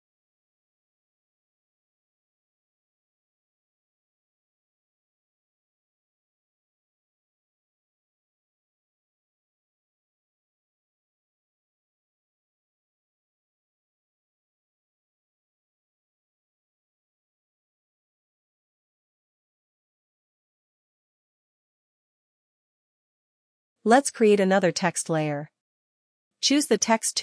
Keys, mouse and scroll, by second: 2.4 click, 6.5 click, 10.9 click, 13.2 click, 14.5 click, 18.3-27.2 drag.